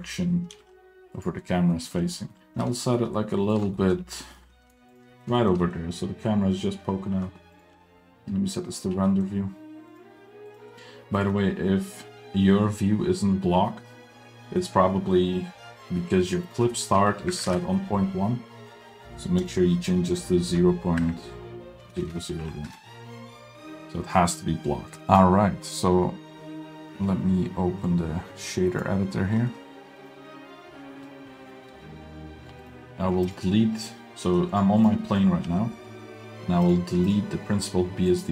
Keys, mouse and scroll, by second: 0.0 middle drag, 0.1 scroll up 2, 0.5 g, 1.7 middle click, 1.9-2.4 scroll up 2, 2.3 middle click, 2.4 g, 3.7 middle click, 4.0-4.3 scroll up 2, 4.2 middle click, 4.5 g, 5.1 middle click, 5.3 shift+middle drag, 5.6 middle click, 6.8-7.5 scroll down 2, 7.5 click, 7.7 z, 8.9 scroll down 2, 9.0 middle drag, 9.3 scroll up 1, 9.9 drag, 10.6 drag, 11.3 middle click, 16.4-17.8 drag, 19.4-22.0 drag, 22.0 KP_0, 22.4 click, 25.1 click, 27.8-29.1 drag, 29.5 middle drag, 30.0-30.3 drag, 30.9 scroll down 3, 31.0 middle click, 31.5-32.4 scroll up 1, 32.6 click, 33.3 click, 34.2 middle click, 34.5 drag, 34.9 drag, 35.1 middle drag, 35.6 g, 36.2 middle click, 36.7 click, 37.1 click, 38.1 click.